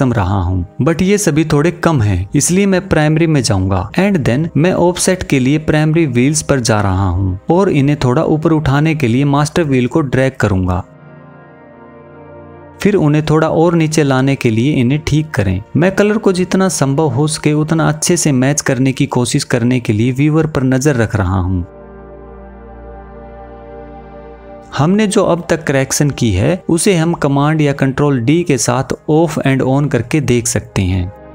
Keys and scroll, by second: 27.7 super+d.